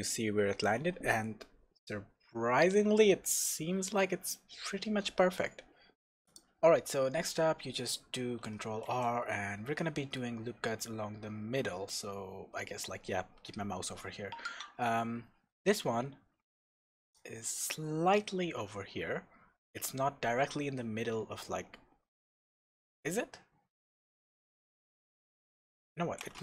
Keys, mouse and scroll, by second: 6.2 scroll up 1, 6.2 click, 6.7 Tab, 7.2-8.9 scroll down 1, 8.9 ctrl+r.